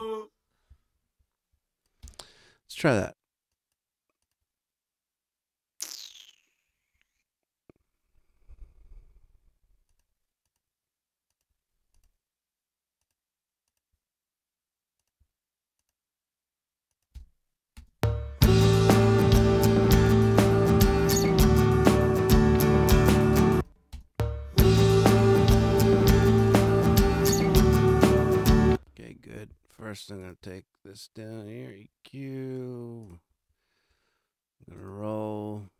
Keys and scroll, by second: 1.9 space, 17.7 space, 23.3 space, 28.4 space.